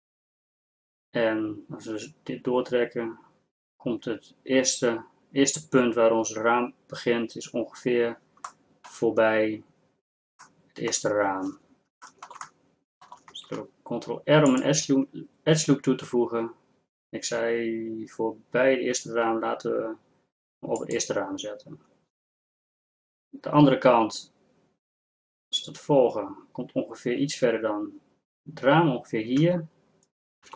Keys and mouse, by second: 10.1 middle click, 13.4 ctrl+r.